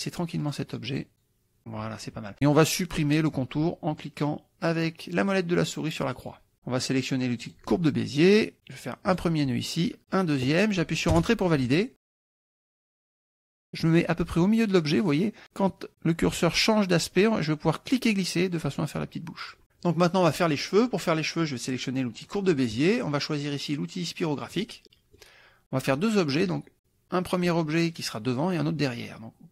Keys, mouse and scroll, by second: 0.4 click, 0.9 click, 6.2 click, 7.5 click, 9.2 click, 10.1 click, 11.1 Return, 13.0 click, 17.9-19.6 drag, 22.3 click, 24.5 click, 24.9 click.